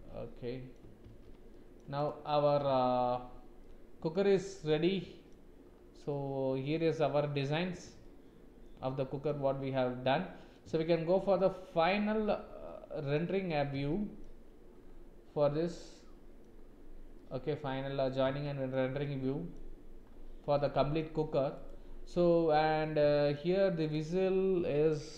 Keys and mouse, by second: 0.0 click, 1.1 ctrl+s, 1.5 click, 1.9 click, 2.3 middle click, 2.6 z, 3.6 middle click, 4.3 click, 4.7 middle click, 6.1-7.4 middle drag, 8.0-9.2 middle drag, 10.0 middle click, 10.9 shift+middle click, 11.4 middle click, 12.6 middle click, 13.9 shift+middle click, 15.7 click, 17.2 click, 18.4 shift+middle click, 19.0 middle click, 20.5 middle click, 21.6 click, 22.2 middle click, 23.1 shift+middle click.